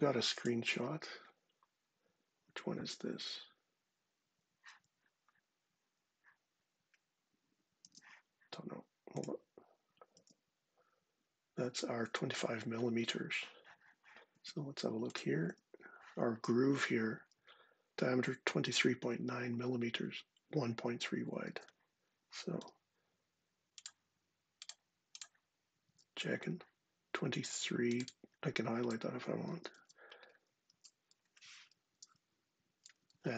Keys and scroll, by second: 0.5 space, 7.6 space, 9.9 space, 14.1 space, 15.3 space, 21.3 super+Tab, 22.4 d, 25.6 super+Tab, 29.3 super+c, 29.5 super+Tab, 30.4 super+v, 31.7 Return, 32.9 super+Tab.